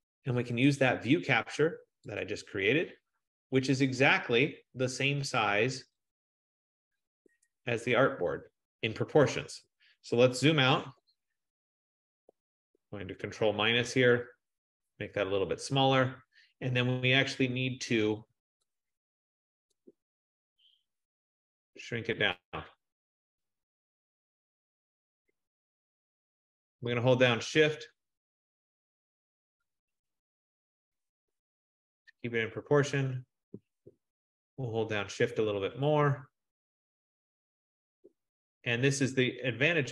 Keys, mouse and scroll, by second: 0.8 click, 6.2 click, 11.1 ctrl+-, 11.5 ctrl+-, 12.1 ctrl+-, 12.5 ctrl+-, 12.9 ctrl+-, 13.4 ctrl+-, 13.8 ctrl+-, 18.4 click, 19.8 click, 27.0-28.4 drag, 28.9 shift+click, 31.8 click, 36.2 shift+click.